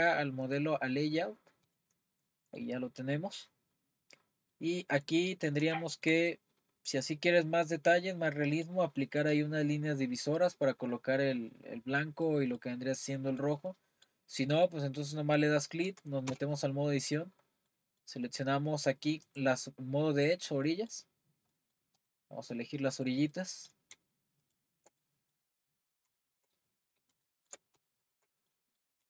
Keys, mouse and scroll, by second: 0.0 click, 0.6 click, 1.1-1.8 scroll down 1, 1.8 click, 2.3-2.7 middle drag, 2.7-3.1 scroll up 4, 3.1-3.5 middle drag, 3.5-4.1 scroll up 1, 4.1-4.5 scroll down 1, 4.5-5.1 middle drag, 5.1-5.7 scroll up 1, 5.7-14.7 shift+middle drag, 14.7 click, 16.3 Tab, 17.2 click, 17.7-19.3 middle drag, 19.3-20.7 drag, 20.7-22.0 middle drag, 22.0-23.1 drag, 23.3-24.5 middle drag, 24.5 shift+click, 25.0 middle click, 25.8-26.2 scroll down 3, 26.2 shift+middle click, 26.6-27.2 scroll up 4, 27.2 shift+middle click, 28.1 shift+click, 28.5-29.0 middle drag.